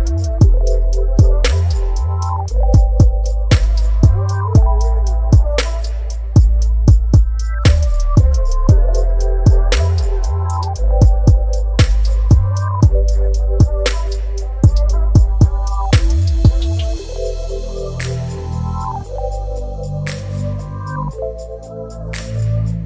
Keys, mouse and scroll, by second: 0.0 space, 2.0 alt+scroll up 1, 5.0 Right, 12.9 0, 16.6 ctrl+0, 19.1 click, 21.0-22.8 drag.